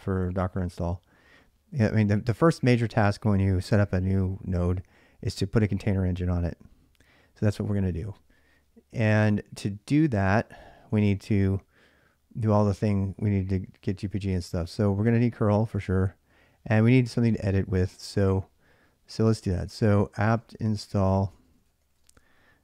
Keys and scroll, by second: 19.8-21.8 typing.